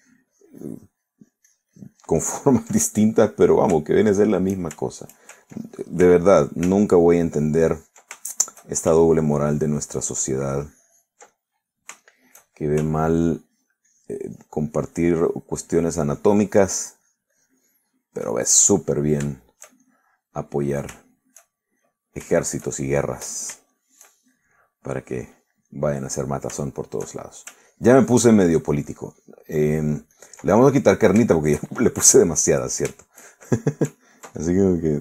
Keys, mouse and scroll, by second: 0.0-3.8 ctrl+drag, 3.8 ctrl+middle click, 4.8 ctrl+shift+middle click, 5.8 shift+middle click, 7.1 f, 7.5 click, 7.9-9.2 ctrl+drag, 9.3 ctrl+shift+middle click, 10.1-12.3 ctrl+shift+drag, 12.4 ctrl+middle click, 13.1 ctrl+shift+middle click, 14.2 ctrl+click, 16.7-19.3 ctrl+drag, 19.4 ctrl+middle click, 20.0 ctrl+middle click, 20.7 shift+middle click, 21.2 middle click, 21.6 middle click, 22.0 shift+middle click, 23.5-24.7 shift+middle drag, 27.2 shift+middle click, 27.7 shift+middle click, 28.8 ctrl+click, 29.5-31.5 ctrl+drag, 31.6 ctrl+middle click, 32.4 shift+middle click, 33.4-34.7 middle drag.